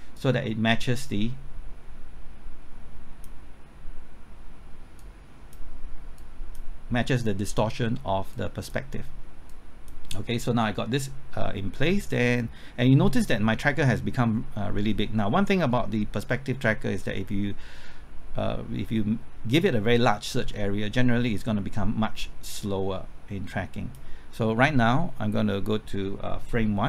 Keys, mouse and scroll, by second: 12.8 scroll down 1, 14.9 scroll up 1, 22.4-26.8 drag.